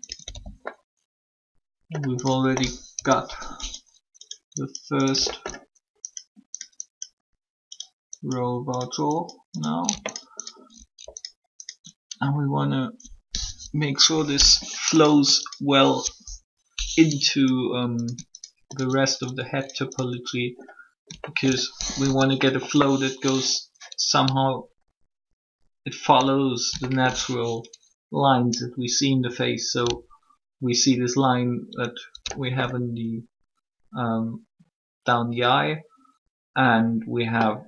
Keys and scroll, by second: 2.9 3, 13.4 1, 21.8 shift+3.